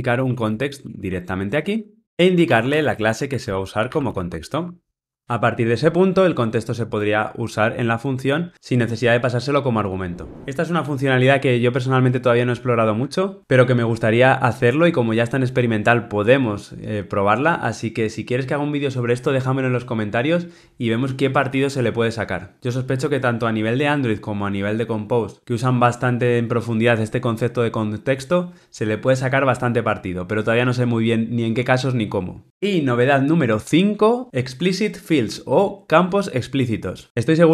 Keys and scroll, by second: 4.5 Escape.